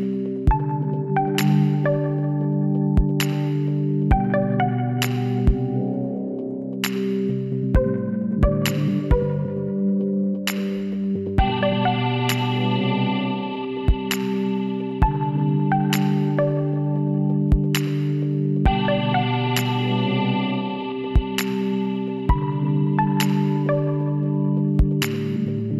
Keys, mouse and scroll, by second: 1.1 middle click, 2.0 Tab, 5.5-6.9 middle drag, 8.1-13.4 middle drag, 13.0 click, 13.4 Tab, 15.7-16.8 drag, 16.8 middle click, 17.6 click, 17.7 right click.